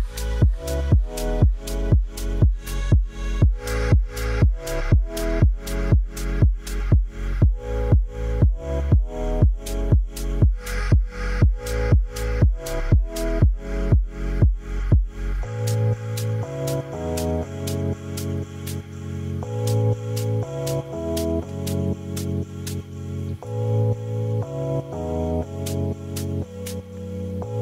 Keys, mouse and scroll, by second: 0.0 click, 0.9 click, 1.5 click, 3.0 Tab, 3.4 shift+z, 3.7 shift+middle drag, 4.0 middle drag, 5.2 click, 5.2 middle click, 5.9 click, 10.8 click, 14.8 drag, 15.0 middle click, 15.6 KP_1, 17.0 KP_0, 18.5 middle click, 19.4 Tab, 19.6 shift+click, 20.0 middle click, 20.4 shift+click, 20.4 shift+middle click, 20.5 shift+click, 21.3 2, 21.8 alt+click, 23.1 ctrl+b, 27.3 Tab.